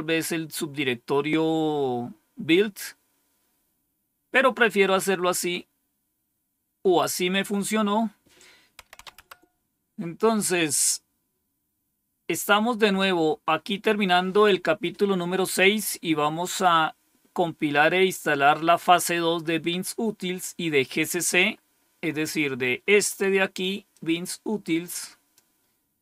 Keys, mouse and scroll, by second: 8.5-9.4 typing, 11.8-13.0 scroll down 1, 23.8-25.3 drag.